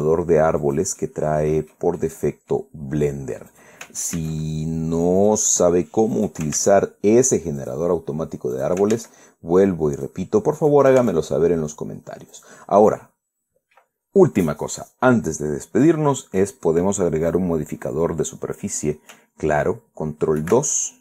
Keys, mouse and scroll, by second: 0.0 ctrl+a, 1.3 click, 1.7 middle click, 2.7 middle click, 2.8 scroll down 1, 3.5 scroll up 1, 4.2 right click, 4.9 ctrl+a, 5.9 click, 6.8 right click, 7.2 ctrl+a, 8.3 click, 9.2 right click, 9.4 click, 9.5 ctrl+right click, 9.6 ctrl+a, 10.7 click, 11.3 right click, 11.7 ctrl+a, 13.0 click, 13.7 middle click.